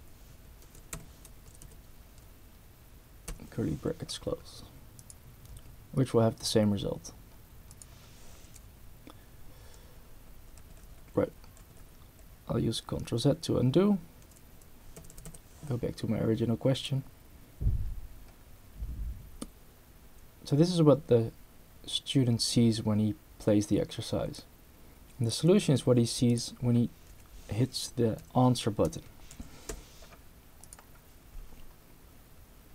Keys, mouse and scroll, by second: 0.7 Right, 0.9 BackSpace, 1.4 Right, 3.3 ], 5.0 click, 7.7 click, 9.8 z, 10.3 z, 12.2 z, 13.2 z, 14.5 Right, 15.0 BackSpace, 16.7 click, 17.7 scroll down 2, 24.4-25.4 drag, 25.8 c, 26.3 drag, 27.1 v, 28.2-30.2 typing, 30.6 click.